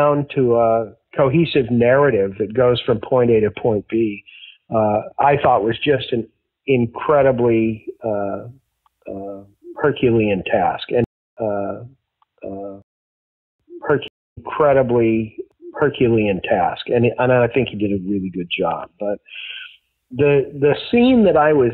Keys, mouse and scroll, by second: 0.5 ctrl+s, 1.6-4.8 drag, 5.4 click, 8.0 click, 8.7 click, 9.4 click, 10.9 space, 11.1 click, 11.3 space, 11.6-12.7 drag, 12.7 space, 13.3 ctrl+shift+Delete, 13.5 space, 14.0 space, 14.2 click, 14.2 space, 16.6-17.9 drag, 18.3 click, 19.1 click, 20.1 click.